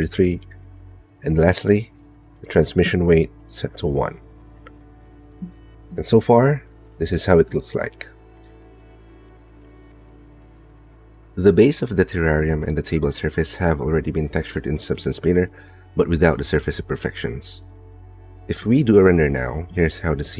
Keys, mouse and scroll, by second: 0.7 KP_3, 3.9-5.0 drag, 5.8 middle click, 6.2 click, 6.3 middle click, 6.4-7.7 drag, 7.9-9.0 drag, 9.2-10.2 drag, 12.1 2, 13.2 shift+click, 13.4 click, 14.4 shift+click, 14.8 middle click, 15.5 middle click, 16.3 middle click, 16.9 shift+middle click, 17.3 middle click, 17.8 shift+middle click, 18.7 z, 19.8 KP_7, 20.2 KP_0.